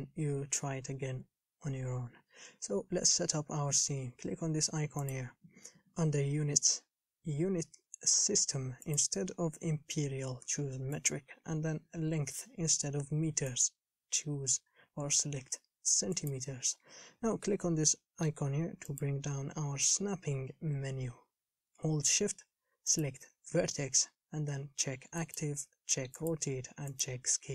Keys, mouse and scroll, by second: 11.3-27.5 drag.